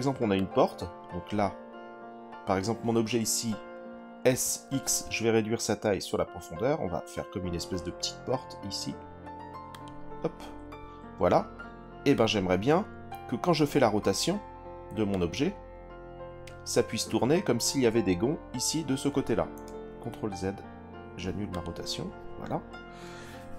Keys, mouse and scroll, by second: 0.3 click, 0.7 click, 4.2 s, 4.6 x, 9.7 click, 12.1 click, 15.1 click, 19.8 ctrl+z, 21.5 click.